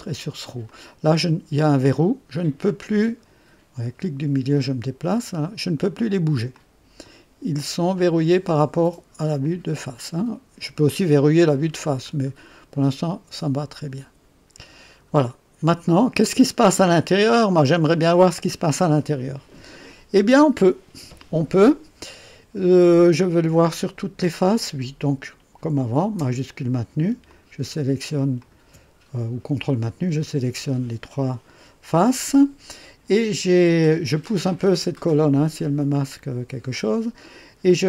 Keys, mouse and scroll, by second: 0.6 click, 2.6-3.4 scroll up 4, 4.0-5.3 middle drag, 6.5-7.2 drag, 7.9-8.6 drag, 9.4-10.9 drag, 11.5-11.8 scroll down 1, 12.1-12.4 scroll up 1, 14.5 click, 27.2 shift+click, 28.3 shift+click, 34.5-36.9 drag.